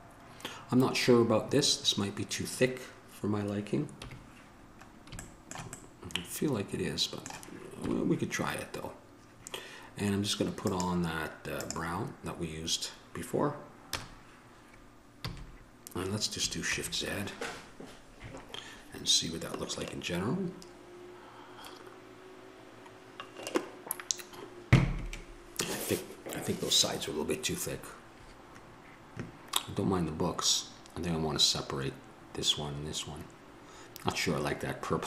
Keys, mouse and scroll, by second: 4.2 KP_1, 8.0 KP_1, 14.1 KP_0, 15.4 a, 17.6 shift+z.